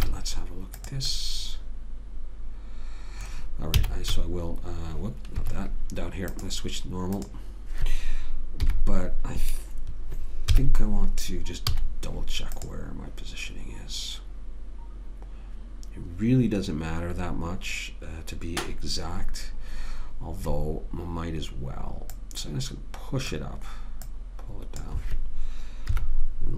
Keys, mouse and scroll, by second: 0.3 z, 4.1 z, 6.7 click, 9.0 KP_1, 10.9 KP_3, 12.1 z, 22.5 click, 26.2 KP_1.